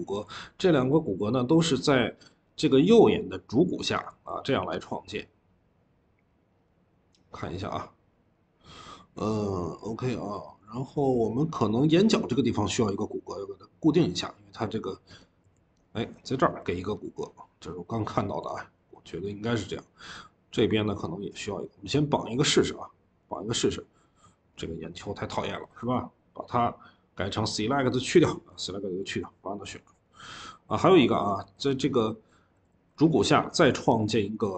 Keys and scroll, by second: 0.1 ctrl+z, 3.9 ctrl+z, 28.4 Escape, 32.6 ctrl+z.